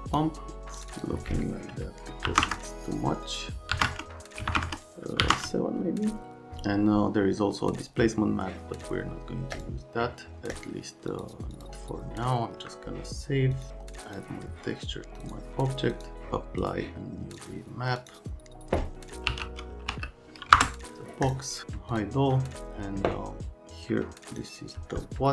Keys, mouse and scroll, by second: 0.7 click, 0.9 click, 2.2 KP_5, 2.4 KP_Enter, 3.7 KP_3, 3.8 KP_Enter, 4.4 KP_1, 4.5 KP_0, 4.5 KP_Enter, 5.2 KP_7, 5.3 KP_Enter, 9.5 click, 10.5 right click, 11.1 right click, 11.5 right click, 13.5 right click, 14.0 click, 15.2 click, 15.9 click, 16.6 click, 17.3 click, 17.9 click, 19.0-20.4 typing, 20.5 Return, 21.3 click, 21.5 scroll up 1, 21.9 click.